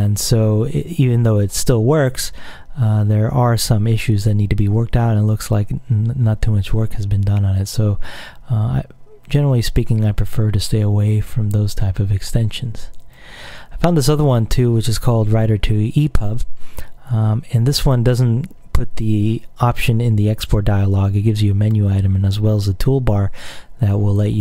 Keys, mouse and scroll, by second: 9.1-9.6 scroll up 1, 13.1 click, 14.5-15.6 scroll down 3, 16.3-18.7 scroll down 2, 23.8 click.